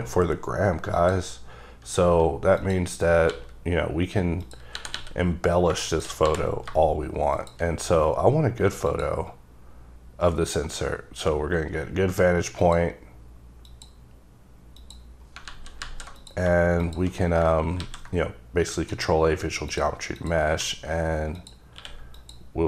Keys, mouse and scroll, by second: 1.1 click, 2.7 click, 3.4 g, 4.9 r, 5.1 r, 6.1 shift+click, 6.4 g, 7.5 click, 7.9 scroll up 3, 9.0 click, 9.6 scroll down 2, 10.8 scroll down 1, 12.7 click, 13.8 click, 14.9 click, 15.6 alt+z, 16.0 alt+z, 16.3 click, 17.9 ctrl+a, 18.9 click, 19.5-19.8 scroll up 2, 19.8 click, 20.3 click, 20.7 q, 21.5 click, 21.9 q, 22.3 click.